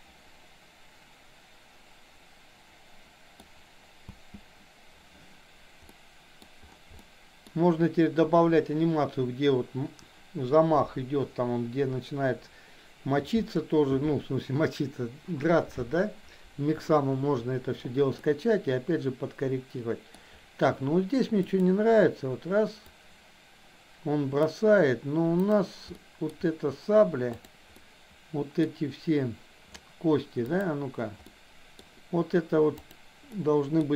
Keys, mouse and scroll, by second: 4.0 space, 5.9 middle click, 7.0 shift+middle click, 18.3-20.1 middle drag, 21.4 click, 22.9 click, 26.0 shift+middle click, 27.4 click, 27.8 middle click, 30.5 click, 31.3 middle click, 32.8 click, 33.3 middle click.